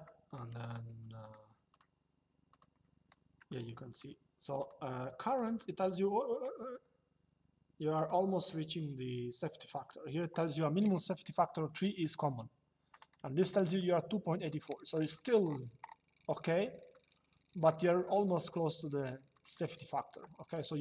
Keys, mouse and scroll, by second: 1.4 click, 3.2 shift+middle click, 4.3 click, 7.7 click, 13.4 shift+middle click, 14.4 middle click, 16.6 shift+middle click, 19.0 click.